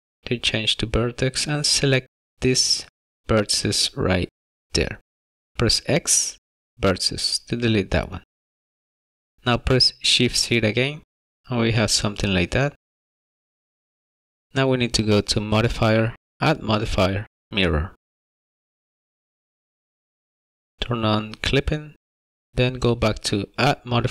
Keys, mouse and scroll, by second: 2.1 click, 5.4 x, 11.2 shift+z, 11.3 middle click, 12.6 shift+middle click, 13.8-14.3 scroll up 1, 17.2 click, 18.1 click, 20.6 click, 22.9 click, 24.0 click.